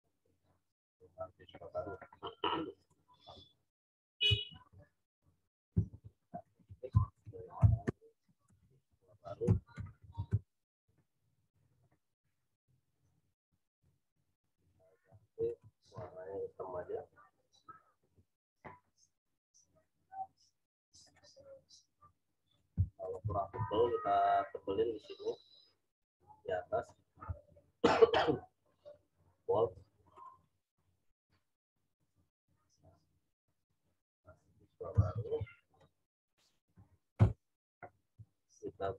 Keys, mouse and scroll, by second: 0.7-4.2 drag, 4.4-10.7 typing, 12.4 click, 15.1 t, 15.4 click, 15.8 ctrl+a, 19.7 click, 23.4 ctrl+a, 28.1 click, 34.9 ctrl+t, 35.7 alt+shift+click, 37.1 Return, 38.1 t, 38.6 click.